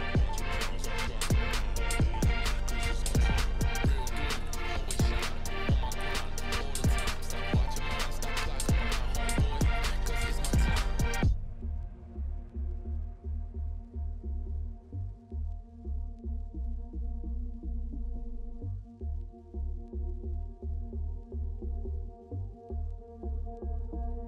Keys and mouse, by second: 0.5 click, 2.2 click, 5.9-7.2 ctrl+middle drag, 7.8 middle click, 11.1-12.7 ctrl+middle drag, 12.9-13.4 middle drag, 15.6 ctrl+middle click, 15.8-16.4 middle drag, 17.1 ctrl+middle click, 18.7 click, 19.0 click, 19.8 click, 24.1-24.2 drag.